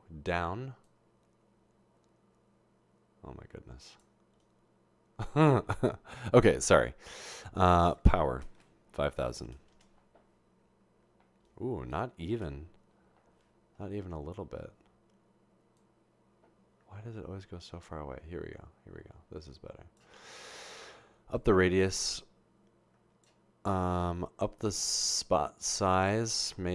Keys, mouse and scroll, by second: 3.1 click, 7.8 click, 9.3 typing, 10.3 Return, 12.9 0, 21.4-23.3 drag, 24.4 click.